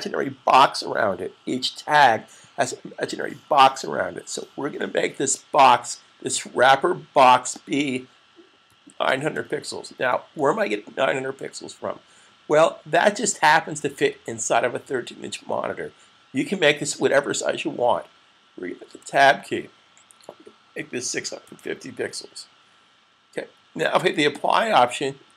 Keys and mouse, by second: 7.2 click, 8.2-10.2 typing, 18.8 Tab, 22.7-23.4 typing, 24.0 click.